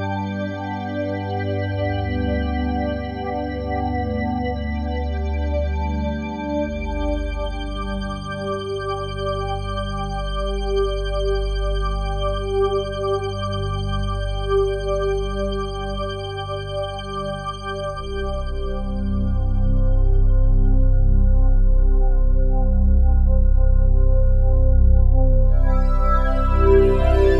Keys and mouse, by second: 0.0 click, 1.1-3.3 drag, 3.9 ctrl+s, 6.1-8.0 drag, 10.9-11.2 drag, 13.0-15.6 drag, 16.1 click, 16.8-20.3 drag, 21.4 super+d, 21.4-23.6 drag, 23.9-25.1 drag.